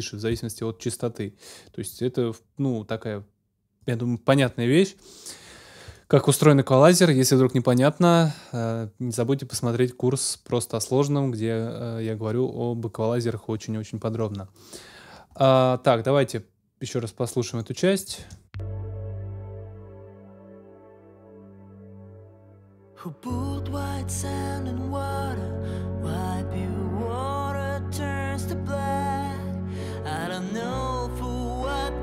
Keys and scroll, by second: 18.2 space, 20.3 super+s.